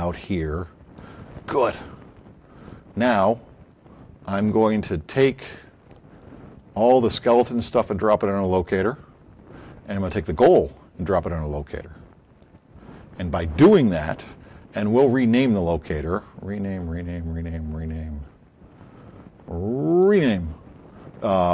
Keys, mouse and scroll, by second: 4.7 click, 6.2-8.1 drag, 10.0 click, 10.6-12.4 drag, 14.4 right click, 19.8 click.